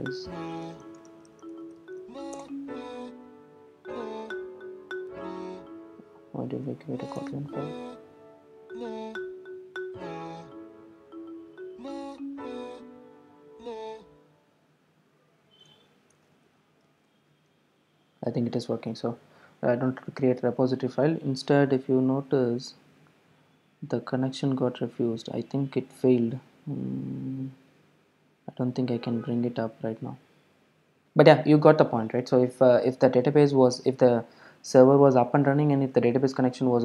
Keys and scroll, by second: 10.1 Delete.